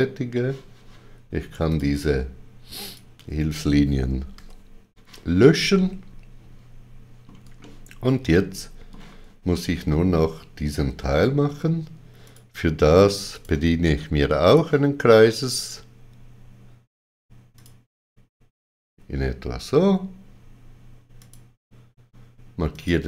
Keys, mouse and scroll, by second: 1.7 click, 2.8 shift+click, 5.7 middle click, 7.6 ctrl+middle click, 12.2 ctrl+middle click, 12.2 shift+click, 12.2 click, 13.3 click, 14.4 click, 17.6 click, 21.2 click.